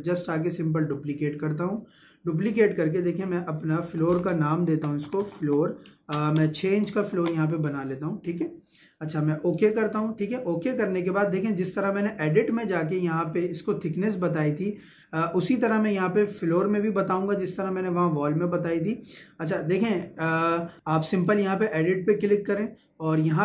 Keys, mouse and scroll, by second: 0.8-4.0 drag, 4.0 shift+f, 4.7 l, 6.0 space, 6.3 6, 9.6 click, 21.3 click.